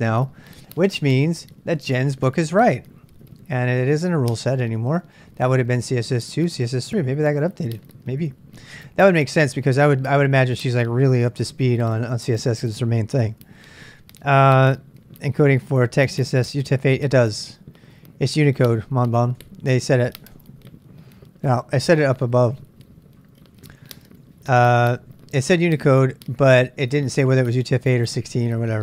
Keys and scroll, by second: 20.0 k, 22.1 k, 22.7 k, 23.1-26.0 k, 26.1-28.8 k.